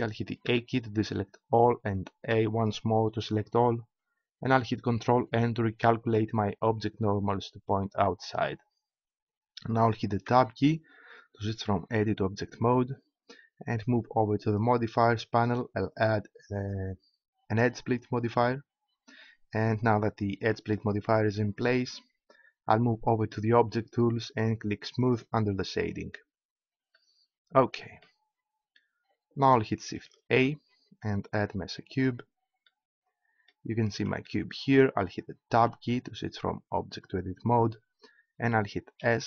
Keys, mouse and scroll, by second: 0.4 a, 3.5 a, 5.1 ctrl+n, 10.3 Tab, 14.5-17.9 drag, 25.0 click, 25.9 click, 30.3 shift+a, 33.6 middle click, 35.5 Tab, 36.9-38.2 middle drag, 39.0 s.